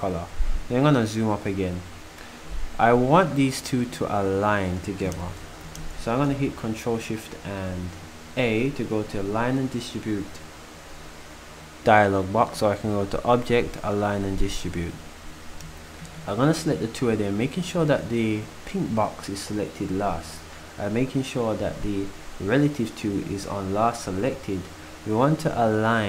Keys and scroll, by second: 5.9 ctrl+shift+a.